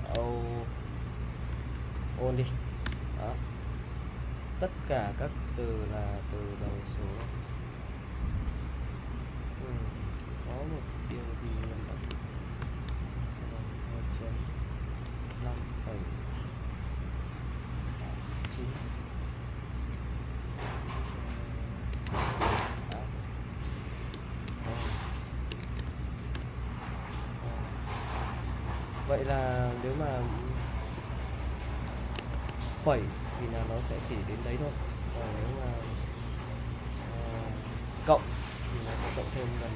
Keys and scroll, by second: 0.0-2.1 typing, 2.8 Return, 10.5 u, 11.1 u, 11.6 u, 12.6 shift+;, 15.3-15.6 typing, 18.4 9, 21.8-26.3 typing, 32.3 shift+;.